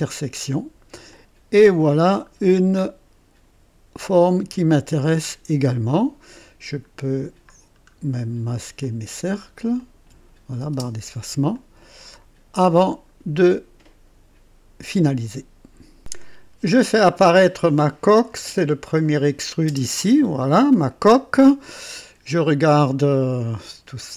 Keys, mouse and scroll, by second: 1.1-5.7 drag, 6.7 middle click, 6.7 scroll up 1, 7.5-7.9 scroll down 2, 8.7 click, 9.7 shift+click, 10.7 space, 11.5-12.2 shift+drag, 12.7 scroll down 1, 15.9 click, 18.9 click, 19.6 space, 20.8 click, 21.7-24.1 drag.